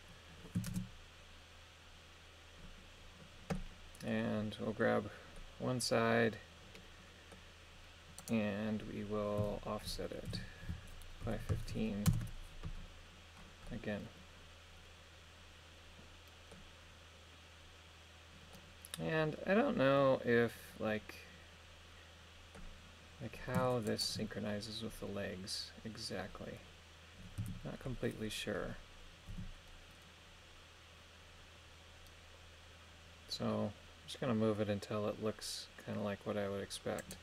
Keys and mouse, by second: 0.7 shift+space, 3.6 middle click, 5.4-7.3 middle drag, 8.2 right click, 9.4 a, 10.3 g, 11.3 KP_1, 11.7 KP_5, 12.1 Return, 13.7-16.5 middle drag, 18.5-22.6 middle drag, 27.4 a, 29.3 g.